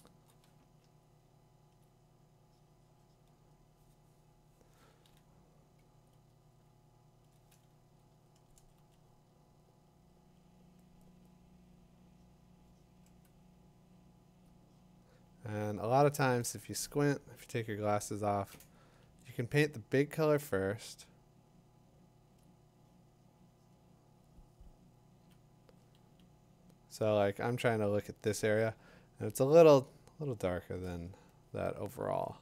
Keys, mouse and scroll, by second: 0.0 click, 1.7 click, 5.8 click, 7.3 click, 8.5 click, 8.8 click, 13.9 click, 14.4 click, 15.7 click, 18.4-22.1 drag, 22.4-27.5 drag, 29.8 click, 32.2 ctrl+z.